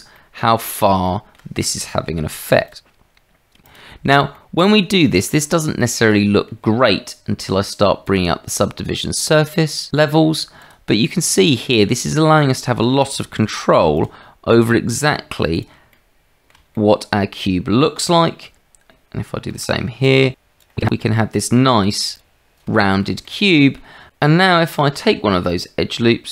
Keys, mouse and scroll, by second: 0.1 middle click, 1.0 shift+middle click, 2.1 ctrl+r, 4.3 click, 5.0 shift+click, 5.9 click, 8.1 click, 10.6 click, 11.4 middle click, 12.5 shift+middle click, 13.4 ctrl+r, 15.9 middle click, 16.7 shift+middle click, 17.8-18.9 drag, 19.5 ctrl+r, 19.8 scroll up 1, 20.8 click, 21.8 ctrl+r, 22.8 shift+click, 23.3 click, 24.1 click, 24.7 shift+middle click, 25.5 click.